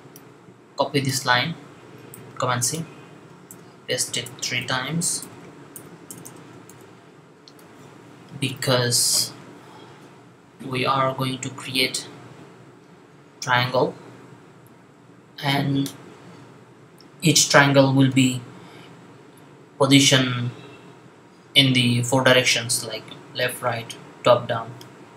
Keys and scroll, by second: 2.0 super+c, 4.5 v, 5.5 v, 6.5 v.